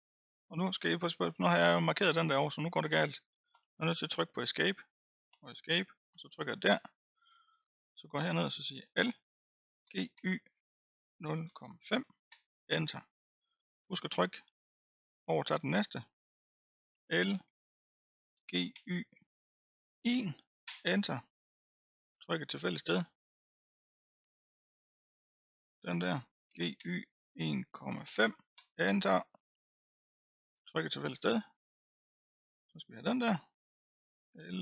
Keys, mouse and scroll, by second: 5.3 Escape, 6.1 click, 6.7-7.6 scroll up 5, 7.6-7.9 scroll down 1, 8.8 l, 9.9 g, 12.4 Return, 13.3-13.8 scroll down 7, 13.8 click, 14.3-15.1 scroll up 5, 15.1-16.9 middle drag, 16.9 l, 18.3 g, 21.7-22.1 scroll down 1, 22.1 click, 22.8-23.4 scroll up 1, 23.4-25.5 middle drag, 25.5 l, 26.5 g, 30.5 click, 31.1-32.2 scroll up 2, 32.2-32.8 middle drag, 32.8-33.4 scroll up 1, 33.4-34.2 scroll up 1, 34.2 l.